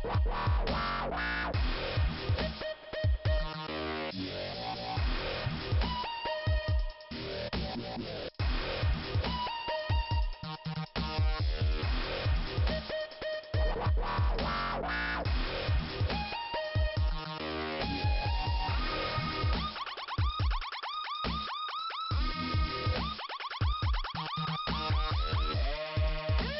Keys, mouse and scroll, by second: 0.3 click, 3.5 click, 3.6 click, 5.6 click, 6.4 click, 7.2 click, 7.3 click, 7.5-8.3 scroll down 2, 8.6 middle click, 10.4 scroll up 2, 11.4 click, 12.3 Delete, 12.9 scroll down 2, 13.7 click, 14.6 middle click, 16.5 click, 17.1 BackSpace, 17.3 Delete, 17.4 click, 17.6 Delete, 19.0 click, 19.5 click, 20.6 Delete, 21.4 scroll down 2, 23.1 middle click, 25.2 middle click, 25.8-26.3 scroll up 1, 26.4 click.